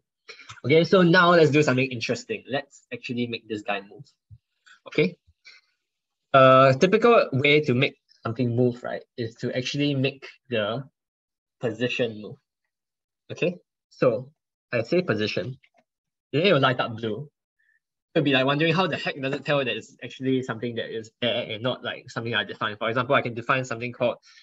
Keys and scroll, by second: 6.1 ctrl+BackSpace, 6.4 ctrl+BackSpace, 6.7 ctrl+BackSpace, 6.9 ctrl+BackSpace, 7.2 ctrl+BackSpace.